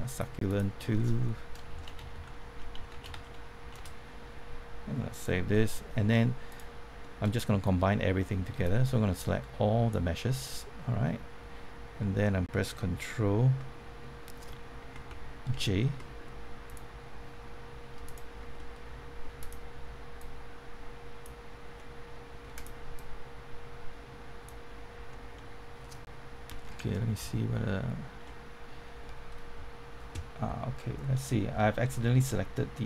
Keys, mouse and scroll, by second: 1.7-3.6 typing, 3.7 Return, 5.1 click, 5.7 middle click, 6.5 click, 7.0 middle click, 7.3 scroll down 1, 7.7 middle click, 8.6 click, 10.3-12.5 middle drag, 15.5 ctrl+j, 16.7 click, 18.5 middle click, 19.3-21.5 drag, 21.7 middle click, 22.5-24.5 drag, 25.1 middle click, 27.1 ctrl+j.